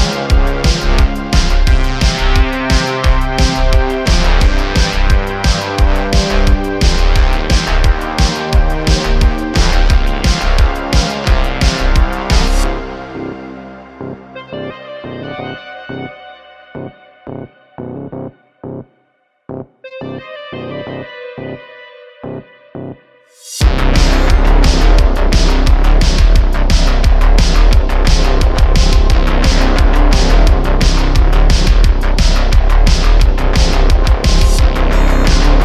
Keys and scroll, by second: 2.1 1, 3.2 shift+a, 5.8 Tab, 6.8 Tab, 7.3 BackSpace, 7.7 Return, 8.0 BackSpace, 8.3 shift+a, 9.2 Tab, 13.6 9, 13.6 0, 13.7 Return, 14.3 s, 16.5 ;, 17.7 ., 20.9 `, 26.3 ., 33.9 shift+a, 34.6 s.